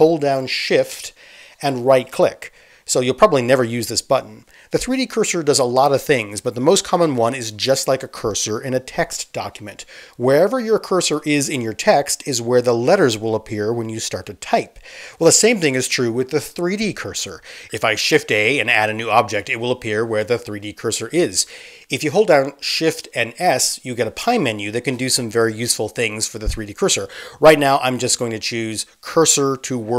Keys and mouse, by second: 1.9 shift+middle click, 2.1-3.4 shift+drag, 3.4 shift+middle click, 3.5-3.8 shift+drag, 3.8 shift+middle click, 4.0 shift+drag, 4.2-4.7 shift+middle drag, 4.7 shift+click, 5.0 shift+middle click, 5.1 shift+click, 6.0-6.5 shift+middle drag, 6.5-29.9 shift+drag, 18.7 shift+a, 22.9 ctrl+z, 23.3 shift+s.